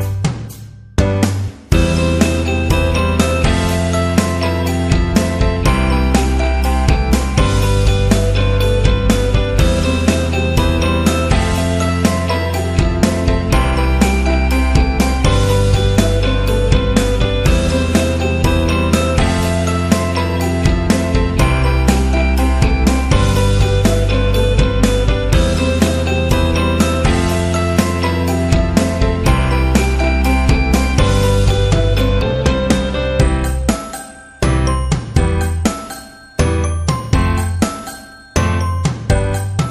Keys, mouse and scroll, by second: 0.7 click, 2.2 click, 3.3 Down, 3.8 Down, 5.4 Down, 5.5 shift+Left, 6.0 shift+Left, 7.6 Down, 8.1 Down, 12.7 Right, 13.5 Right, 14.9 click, 16.5 click, 17.1 alt+click, 20.7-21.4 typing, 20.9 click, 22.7-23.4 typing, 22.7 click, 23.6 click, 26.9-27.7 typing, 27.2 click, 29.3 click, 29.4 click, 30.2 click, 31.2 click, 33.1 t, 34.5 click, 38.9-39.7 typing, 39.3 click.